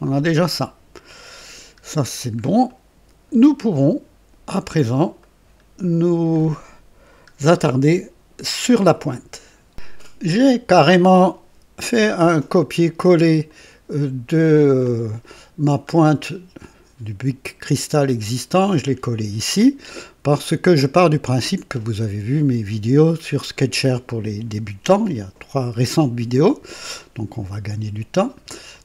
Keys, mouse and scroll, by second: 0.2 right click, 1.4-1.8 scroll up 1, 2.0 scroll down 1, 2.6-3.4 right drag, 5.1-6.1 right drag, 6.3 scroll up 1, 7.3 scroll up 1, 7.8 right click, 13.4 click, 18.0 click, 19.8 scroll down 2, 28.6 click.